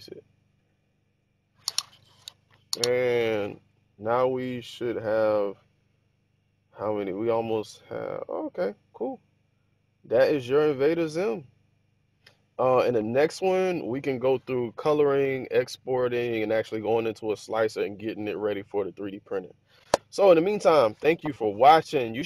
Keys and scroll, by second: 12.8 1.